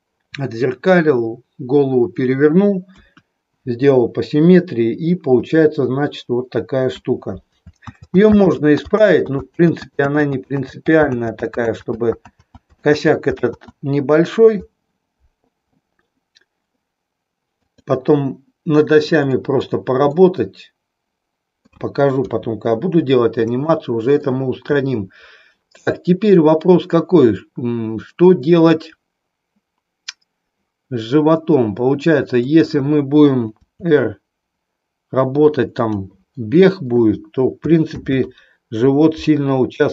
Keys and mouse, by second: 3.0 KP_1, 7.8 ctrl+z, 17.6 click, 19.2 middle click, 20.1-21.8 middle drag, 22.1 KP_3, 23.7 shift+middle click, 32.5 click, 33.6 r, 36.0 click, 38.0 ctrl+z.